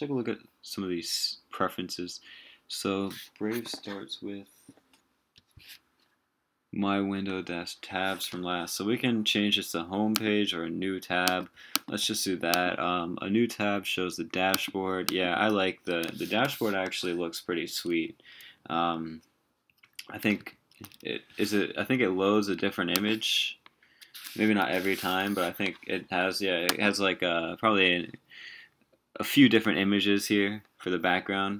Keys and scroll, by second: 16.3 super+t, 20.4 super+t, 24.4 super+t.